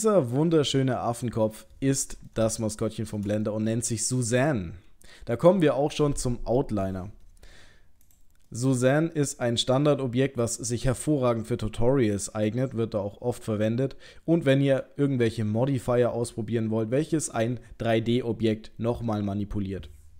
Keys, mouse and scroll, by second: 2.6 shift+middle click, 3.5 middle click, 8.1 click, 8.5 middle click, 9.2-10.5 scroll down 2, 10.5 click.